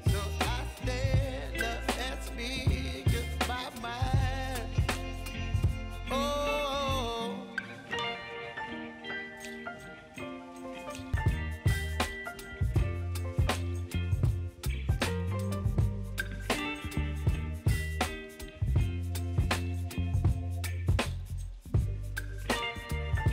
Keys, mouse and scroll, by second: 1.1 space, 1.6 click, 1.9 space, 5.6 space, 6.5 click, 13.4 space, 16.0 j, 17.6 =, 18.6-20.0 drag, 20.0-21.2 typing.